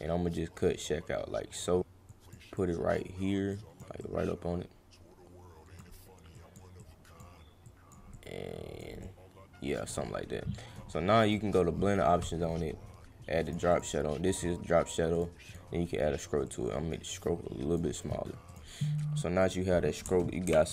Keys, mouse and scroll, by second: 2.1 click, 2.5 click, 3.5 click, 4.0-5.8 drag, 6.3 click, 6.8 click, 7.6 click, 8.1 click, 9.0 click, 10.7 right click, 11.2 click, 13.4 click, 13.7 click, 15.1 click, 15.4 click, 16.4 click, 18.4 click, 19.4 click.